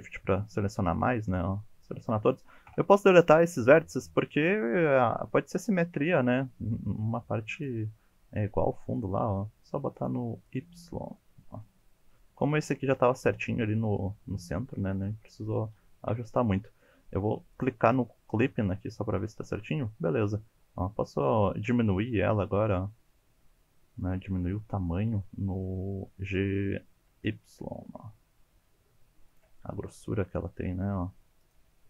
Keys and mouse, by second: 0.1 shift+middle click, 1.0-1.8 shift+drag, 2.7 Delete, 4.1-4.6 middle drag, 4.8 shift+middle drag, 5.6 shift+middle click, 7.6-9.0 drag, 9.9 click, 10.5 click, 11.1 middle drag, 12.2 middle drag, 13.7-14.7 middle drag, 15.0 middle drag, 16.1 a, 17.5 click, 18.4 g, 20.3 g, 27.1 y, 29.3 click, 29.7-31.2 middle drag, 31.4 click, 31.7-31.8 middle drag.